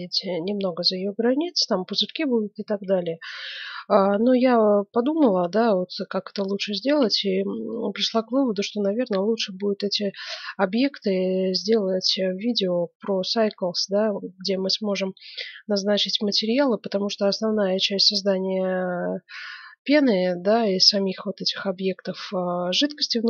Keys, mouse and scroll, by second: 7.6-9.4 middle drag.